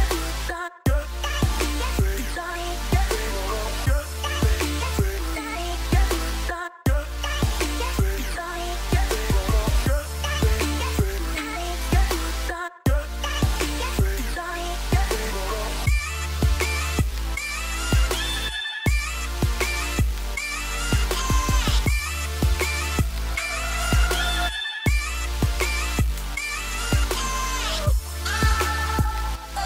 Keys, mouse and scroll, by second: 2.2 right click, 3.5 right click.